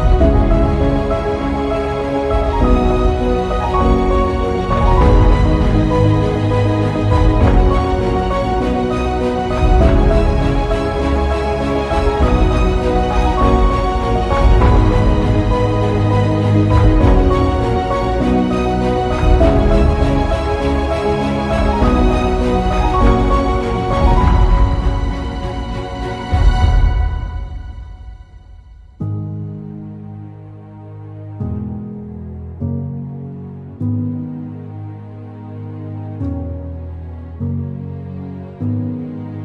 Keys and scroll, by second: 20.5 space, 21.1 space, 22.5 z.